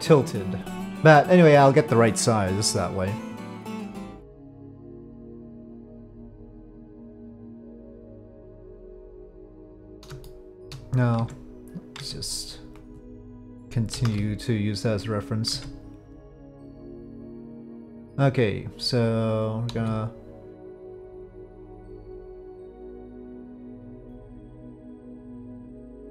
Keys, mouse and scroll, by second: 1.1-2.1 middle drag, 3.7-5.0 middle drag, 5.4 middle drag, 5.7-6.9 drag, 10.2-10.6 shift+drag, 11.2 Tab, 12.0 Tab, 13.9 KP_5, 14.0 KP_1, 15.5 Tab, 18.0-19.3 drag, 19.8 s, 23.2-24.4 middle drag, 25.9-26.1 drag.